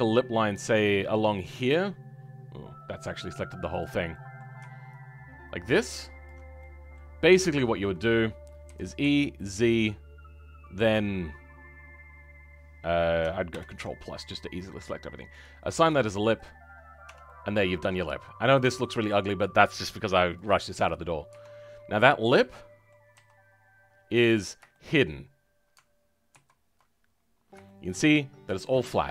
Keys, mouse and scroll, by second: 0.7 alt+click, 1.7 scroll down 2, 3.7 click, 4.0-6.2 middle drag, 6.2 ctrl+click, 6.5 middle click, 7.1-7.4 scroll up 2, 7.4-8.6 shift+middle drag, 8.6 e, 13.4 ctrl+KP_Add, 15.3-16.6 drag, 16.6-17.0 scroll down 3, 17.0 Tab, 17.2 middle click, 18.1-19.9 scroll up 2, 20.3-21.4 drag, 21.4-22.3 scroll down 10, 22.3 middle click, 23.1 a.